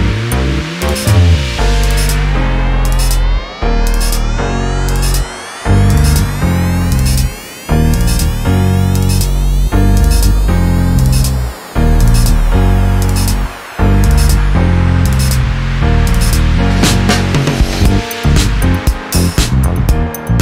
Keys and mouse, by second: 0.5 -, 1.6 click, 2.5 click, 3.5 click, 4.1 click, 4.5 click, 5.1 click, 6.1 ctrl+shift+click, 7.7 -, 8.1 space, 8.6 =, 10.1 =, 11.3 -, 13.1 space, 13.5 click, 13.8 =, 14.3 space, 16.5 BackSpace.